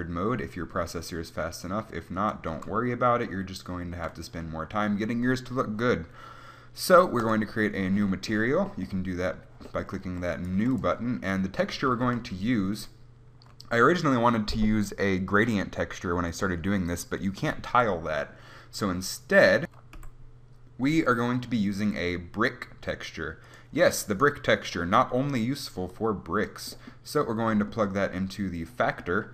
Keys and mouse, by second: 1.9-4.6 drag, 7.3-9.1 drag, 10.4 right click, 10.6 g, 11.1 click, 12.0 shift+a, 26.8-28.0 drag.